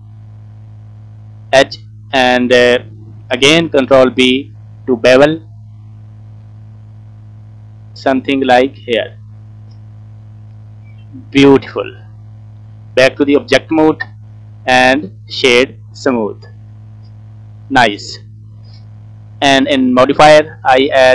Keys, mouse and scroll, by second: 1.6 alt+click, 2.1-3.1 scroll down 1, 4.1 ctrl+b, 8.9 click, 9.1 click, 9.3 scroll down 2, 9.5 middle click, 10.3 scroll up 2, 11.0 middle click, 12.9 Tab, 13.2 scroll down 3, 13.5 middle click, 14.5 right click, 15.4 middle click, 16.0 scroll up 2, 16.3 scroll down 3, 16.5 middle click, 17.3-17.7 scroll up 2, 17.7 scroll down 1, 17.8 middle click, 18.9-19.8 scroll up 1, 19.8 click, 20.8 click.